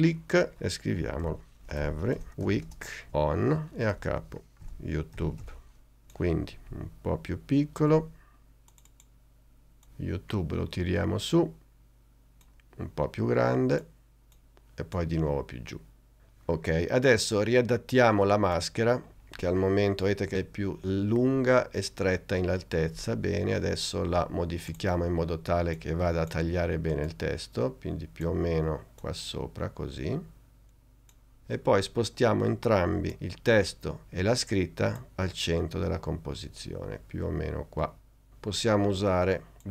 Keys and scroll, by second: 0.9-3.3 typing, 4.1 shift+Return, 4.3-6.1 typing.